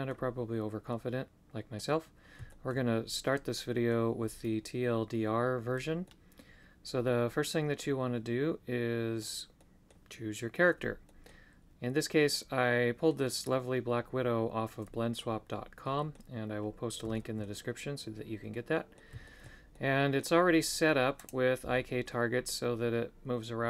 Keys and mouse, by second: 0.9 middle click, 2.5 shift+middle click, 3.5 middle click, 6.0-9.2 middle drag, 9.5 middle click, 11.0 middle click, 12.3 middle click, 15.2-16.2 middle drag, 17.1 shift+middle click, 18.5 middle click, 19.2 shift+middle click, 19.7 middle click, 21.2-22.6 right drag.